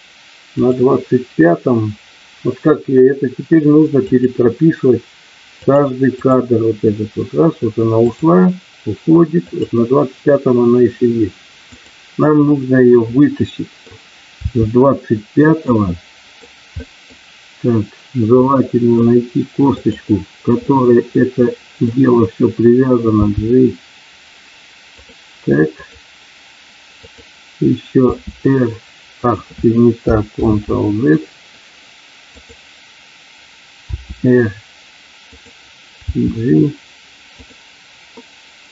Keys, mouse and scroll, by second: 0.5 click, 4.0 click, 5.5 click, 6.1 click, 8.0 click, 9.5 click, 11.8 click, 12.4-13.8 middle drag, 14.4 r, 15.4 click, 15.8 middle click, 16.8 middle click, 18.3 middle click, 19.7 click, 20.6-21.9 middle drag, 23.0 g, 25.8 click, 28.0 r, 30.4 ctrl+z, 32.3 click, 33.9 r, 35.3 click, 36.2 g, 37.4 click, 38.2-38.7 middle drag.